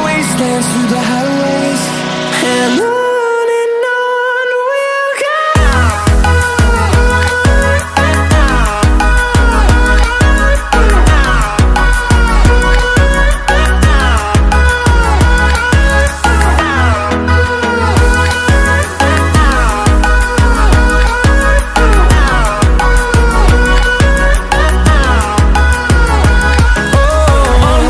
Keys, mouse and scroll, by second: 0.0 o, 0.3 Return, 2.7 click, 2.9 click, 4.7 click, 5.7 scroll down 1, 6.1 Escape, 6.3 scroll up 1, 6.5 middle click, 7.1-10.8 typing, 12.2 click, 13.3 click, 14.2 click, 14.7 right click, 15.5 click, 16.0 Escape, 16.8 scroll down 1, 17.2 scroll up 1, 18.2 middle click, 19.1 click, 19.5 right click, 20.7 click, 22.1 click, 24.1 click, 26.6 click.